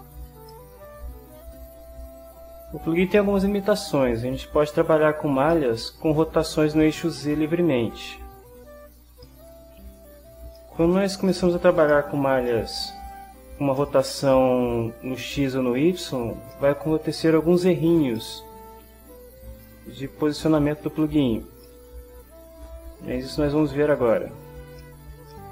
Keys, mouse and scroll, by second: 0.5-1.5 shift+middle drag, 2.2 click, 3.3-5.0 middle drag, 5.5 middle click, 7.2-8.8 drag, 9.2 shift+middle click, 9.3 shift+click, 9.5 shift+middle click, 10.5 shift+click, 11.3 ctrl+click, 11.5 ctrl+middle click, 11.9 ctrl+shift+middle click, 12.1 ctrl+shift+click, 12.5 ctrl+shift+middle click, 12.6 shift+click, 12.7 shift+middle click, 13.1 click, 13.8 middle click, 16.5-17.6 middle drag, 18.1-20.4 middle drag, 21.7 middle click, 24.1 click, 24.8-25.5 shift+middle drag.